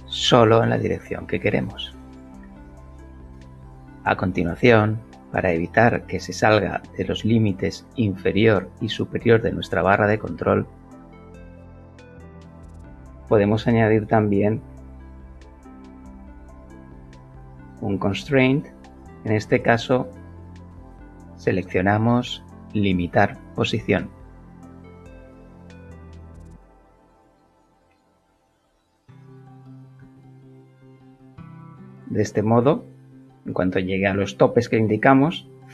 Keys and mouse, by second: 1.5-2.3 shift+middle drag, 7.3-7.6 shift+middle drag, 7.8 shift+middle click, 8.3-8.7 shift+middle drag, 8.9 shift+middle click, 9.3-9.7 shift+middle drag, 10.6-11.0 shift+middle drag, 14.6 shift+click, 15.9 click, 21.1 click, 26.1 click, 27.4 click, 29.0 click, 29.8 KP_1, 30.0 Return, 31.3 Return.